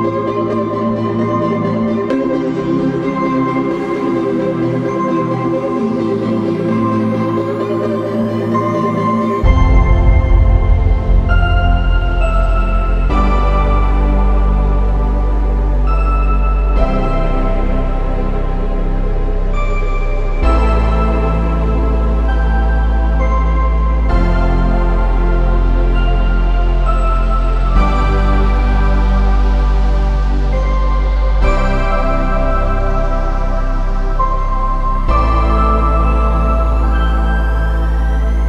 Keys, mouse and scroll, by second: 0.2 click, 3.4 Escape, 4.0 click, 4.6 x, 5.2-5.6 scroll up 1, 5.6 Escape, 6.2-7.0 scroll down 1, 7.0 middle click, 9.5 click, 12.4 middle click, 13.4 click, 14.2 middle click, 15.6 click, 17.6 Escape, 19.5 click, 19.8 x, 20.1-20.5 scroll up 1, 20.5 middle click, 21.0 Escape, 21.3-22.4 scroll down 1, 22.6 click, 27.0 click, 27.4 scroll down 1, 28.5 middle click, 29.2-29.9 scroll down 1, 30.4 click, 36.0 click, 36.6-37.3 scroll up 1, 37.8-38.4 scroll down 1.